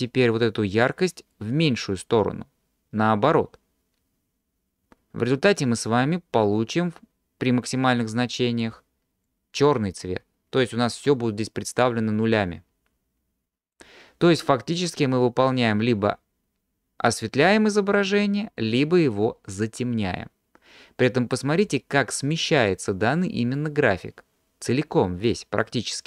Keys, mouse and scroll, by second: 1.3-4.6 drag, 5.3-8.7 drag, 9.3-12.0 drag, 13.4-14.1 drag, 15.0-21.7 drag, 23.6-26.0 drag.